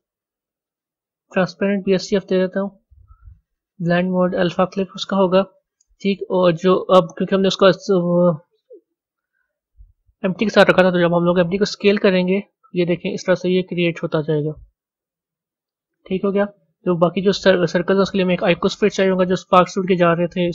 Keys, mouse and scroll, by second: 0.8-7.0 drag, 9.3 click, 11.5 s, 18.6-19.3 middle drag, 19.3-20.2 scroll down 3.